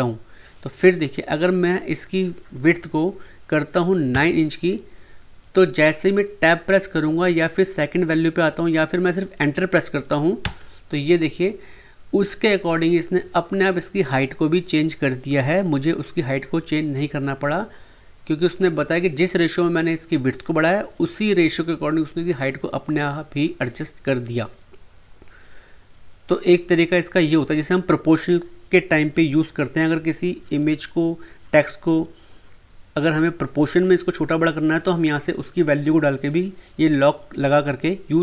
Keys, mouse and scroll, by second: 1.9 click, 10.4 Return.